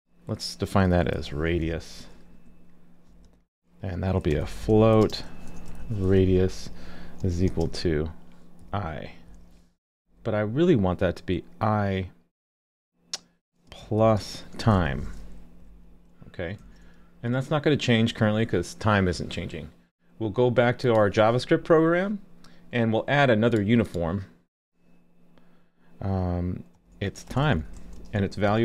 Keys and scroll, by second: 16.6 super+s.